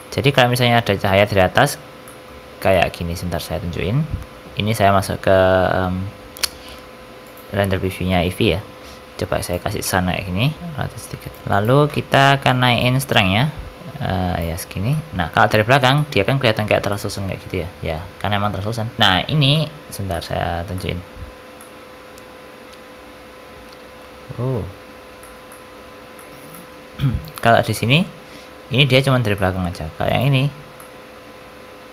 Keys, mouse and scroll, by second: 2.0 middle click, 2.7 middle click, 3.0 z, 3.8 shift+a, 9.7 middle click, 10.7 r, 11.4 click, 14.8 middle click, 15.3-15.8 scroll up 3, 15.6 shift+middle click, 15.9 middle click, 16.4-16.9 scroll up 2, 16.9 middle click, 19.0 click, 19.2 scroll down 3, 19.5 middle click, 19.8 middle click, 19.8 scroll up 1, 20.1 middle click, 20.5 scroll down 3, 20.7 middle click, 21.1-21.9 scroll up 3, 21.5 middle click, 24.7-25.1 scroll up 1, 25.1 shift+middle click, 25.3 scroll down 1, 25.4 middle click, 25.7 shift+middle click, 26.1 middle click, 26.4 middle click, 27.2 ctrl+shift+click, 27.7 middle click, 29.3 middle click, 30.0 ctrl+shift+click, 30.7 middle click.